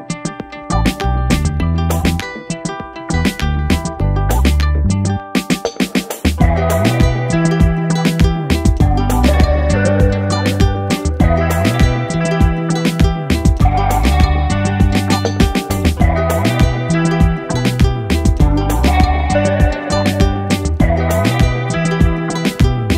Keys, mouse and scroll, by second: 0.5 ctrl+click, 2.4 ctrl+shift+i, 4.3 space, 4.5 click, 4.7 space, 5.7-10.1 drag, 10.1 space, 10.2 click, 10.7 space, 11.0-16.6 drag, 21.0 click.